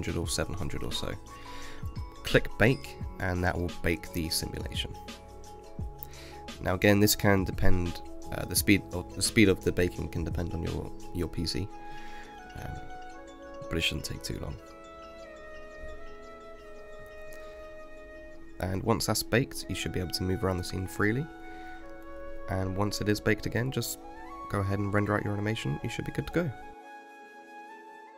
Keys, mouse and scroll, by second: 0.2 KP_0, 3.0-11.8 drag, 12.1 space, 21.7 space, 23.6 scroll up 1, 25.4 click.